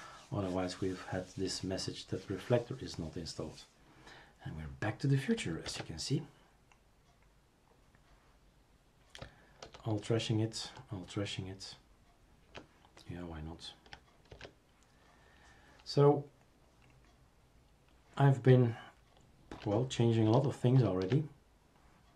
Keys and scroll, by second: 5.7 super+é, 9.6 alt+t, 10.6 alt+t, 14.3 super+&, 20.7 ctrl+alt+Return.